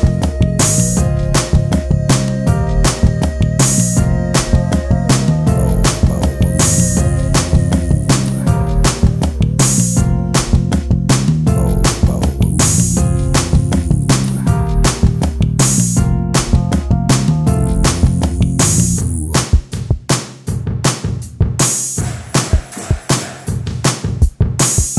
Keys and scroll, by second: 17.4 ctrl+space.